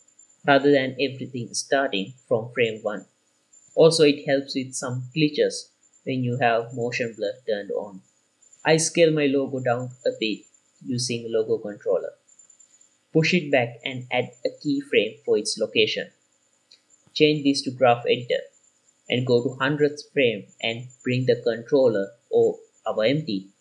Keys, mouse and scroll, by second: 2.8 space, 4.9 click, 5.8-6.3 scroll down 2, 7.4 click, 8.4-9.5 scroll up 4, 9.5 s, 12.5 click, 13.2 g, 13.2 y, 14.2 click, 14.9 i, 17.6 click, 18.8 click, 19.2 n, 21.3-23.3 drag.